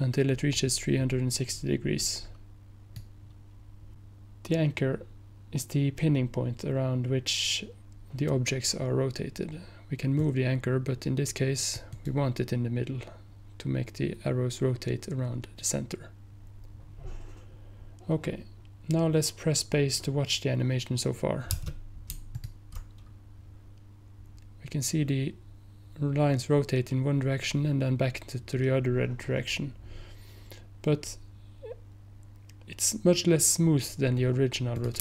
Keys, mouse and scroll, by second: 10.3-12.0 drag, 12.0 right click, 22.4 ctrl+click, 34.8-35.0 drag.